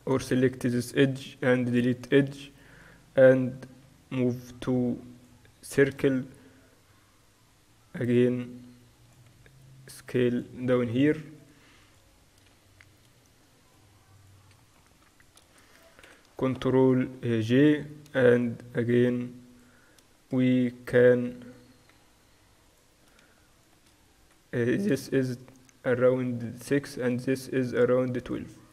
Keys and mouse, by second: 1.1 x, 2.8-5.9 drag, 3.5 w, 5.9 z, 7.4-9.4 drag, 9.4 s, 10.9 Tab, 11.5-12.6 drag, 12.6 z, 15.2 right click, 16.0-17.2 right drag, 16.2 ctrl+j, 16.5 Tab, 16.9 z, 18.2 a, 18.4-25.6 right drag, 19.0-20.9 drag, 21.2 a, 22.0 s, 25.0 a, 26.9 a.